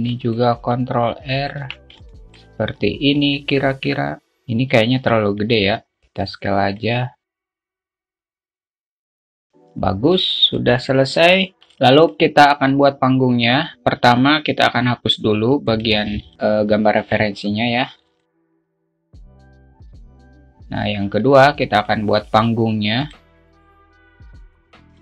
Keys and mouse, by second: 0.4 ctrl+r, 2.3 alt+Tab, 2.4-2.9 alt+middle drag, 3.2 alt+middle click, 4.6 Tab, 5.9 1, 6.1 alt+z, 6.1 s, 8.0 click, 8.5 s, 9.5 Tab, 10.8-11.1 alt+shift+middle drag, 11.6 middle click, 16.2-17.4 drag, 17.4 Delete, 18.6 click, 18.8 Delete, 19.9 Delete, 20.9 shift+Delete, 21.4 shift+a, 22.6 s, 23.9-25.0 drag.